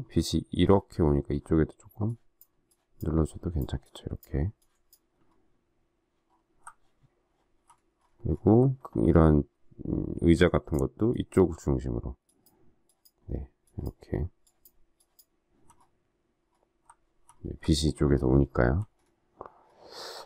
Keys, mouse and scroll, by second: 5.1 alt+scroll down 1, 7.8 alt+scroll up 1, 15.7 alt+scroll down 1, 17.3 alt+scroll down 1, 18.9 alt+scroll up 1.